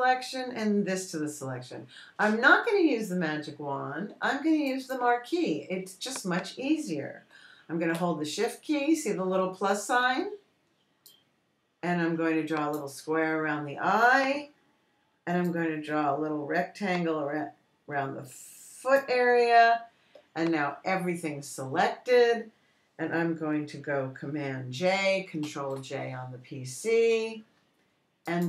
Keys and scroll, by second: 26.9 super+j.